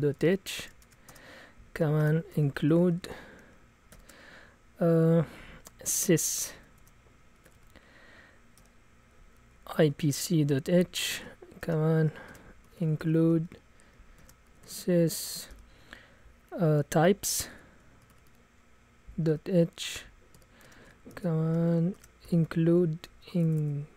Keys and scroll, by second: 0.0-3.9 typing, 5.7-15.5 typing, 17.0-19.3 typing, 20.3-23.9 typing.